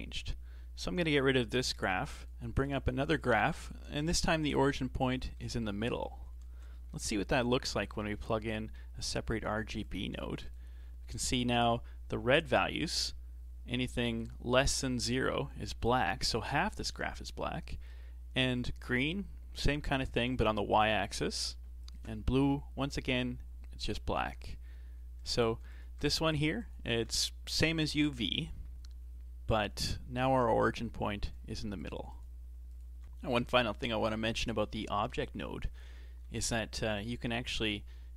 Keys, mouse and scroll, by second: 1.1 click, 2.2 click, 2.8-3.2 scroll up 4, 3.2-6.9 shift+middle drag, 6.9 shift+a, 12.6-15.6 shift+middle drag, 18.6 ctrl+shift+click, 21.9 ctrl+shift+click, 25.7 ctrl+shift+click, 26.7 ctrl+shift+click, 31.8 ctrl+shift+click, 32.0 ctrl+shift+click, 32.1 ctrl+shift+click, 32.8 ctrl+shift+click.